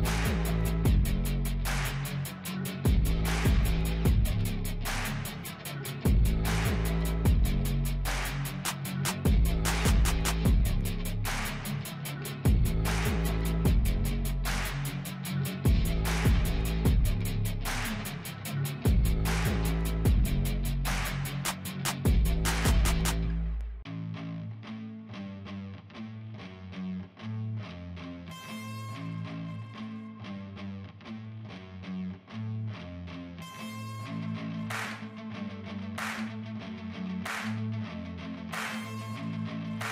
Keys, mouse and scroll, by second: 1.8 double click, 20.9 ctrl+j, 24.7 double click, 28.6 4, 29.7-32.2 typing, 35.2 ctrl+a, 36.5 ctrl+d, 37.0 ctrl+double click.